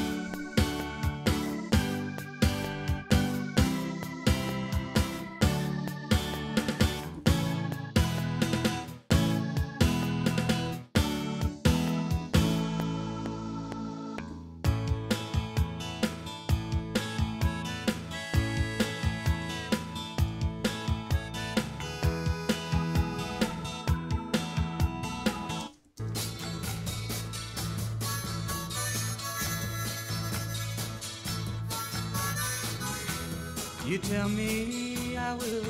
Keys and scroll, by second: 5.1 ctrl+Left, 7.1 ctrl+Right, 12.2 q, 12.4 Return, 14.3 i, 19.4 i, 24.0 ctrl+Left, 25.6 space, 30.3 ctrl+s.